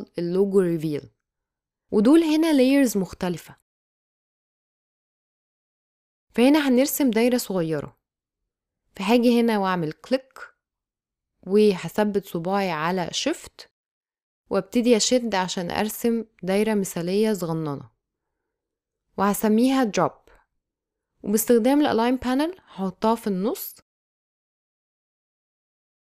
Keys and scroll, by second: 0.0 space, 5.4 space, 18.9 Return, 19.0-21.5 typing.